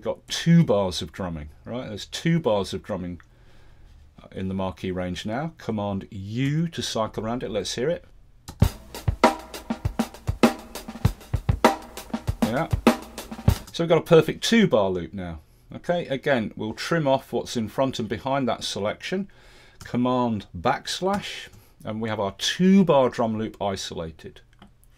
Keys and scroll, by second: 6.5 super+u, 8.5 space, 13.6 space, 21.2 super+\.